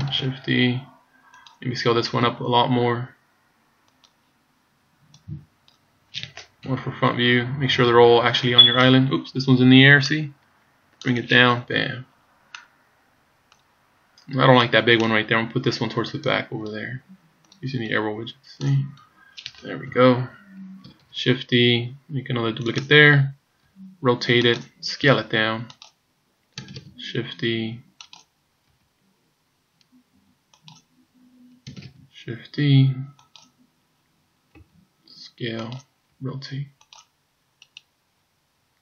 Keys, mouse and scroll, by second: 0.2 shift+d, 2.2 s, 5.2 click, 6.7 KP_1, 7.9 KP_3, 10.1 click, 11.7 KP_1, 12.5 middle click, 14.1-14.6 scroll down 4, 14.6 middle click, 15.7 click, 17.7 click, 19.9 KP_7, 21.2 shift+d, 23.7 r, 25.1 s, 26.7 shift+d, 28.8 r, 31.9 shift+d, 34.6 s, 36.1 r, 37.7 right click.